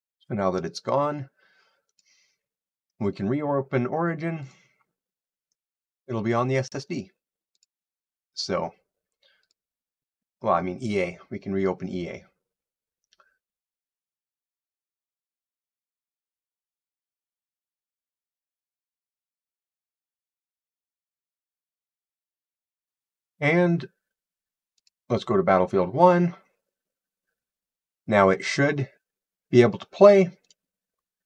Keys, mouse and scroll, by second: 0.8 click, 5.0 click, 6.3 click, 8.2 click, 11.0 click, 12.2 click, 13.6 click, 24.7-29.8 drag, 30.4 click.